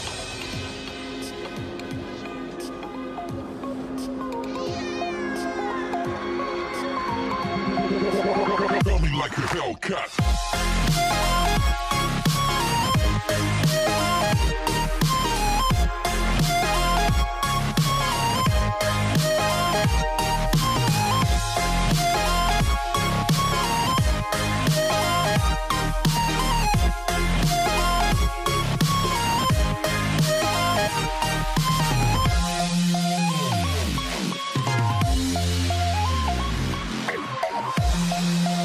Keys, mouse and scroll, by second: 0.0 n, 1.7 click, 2.9-3.5 scroll up 5, 3.5-4.0 scroll down 2, 4.0 scroll down 1, 4.2 s, 7.7 s, 9.5 s, 11.2 s, 15.0 Tab, 15.9 click, 18.8 ctrl+r, 23.9 ctrl+b, 27.6 ctrl+r, 29.8 ctrl+b, 35.0 click, 36.0 click, 37.8 click.